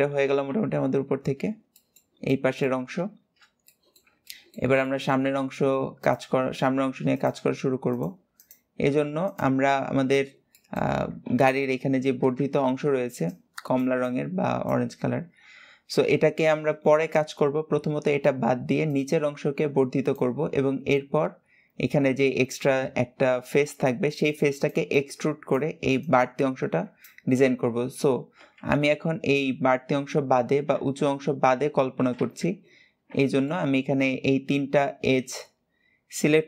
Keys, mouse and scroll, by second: 0.1 alt+z, 0.3 KP_7, 1.2-1.5 scroll down 2, 1.5-3.0 shift+middle drag, 3.0-3.4 scroll down 1, 3.4-5.1 shift+middle drag, 5.1-5.8 scroll up 3, 5.8 click, 6.9 click, 7.7 shift+click, 8.1 shift+click, 9.0 shift+click, 9.8-10.4 scroll down 1, 10.4 shift+middle click, 11.0 KP_3, 28.7 KP_7, 30.0-30.5 scroll up 1, 30.5 alt+z, 31.9 alt+z, 32.6-33.0 scroll down 2, 33.0-36.2 shift+middle drag.